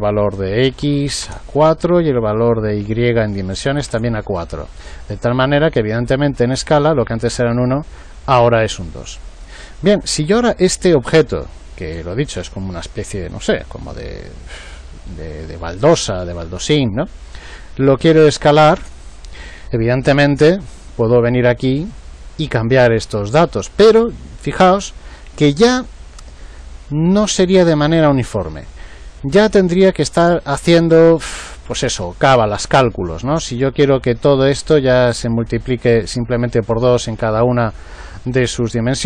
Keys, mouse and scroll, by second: 2.3 click, 11.8-14.2 right drag.